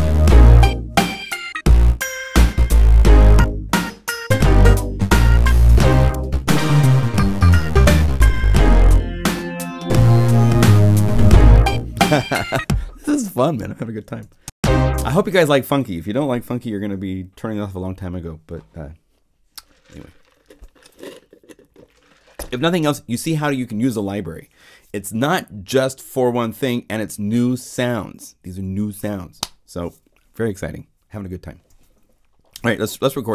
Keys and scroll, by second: 12.5 0, 14.2 0, 14.4 Home, 14.7 0, 31.7 0.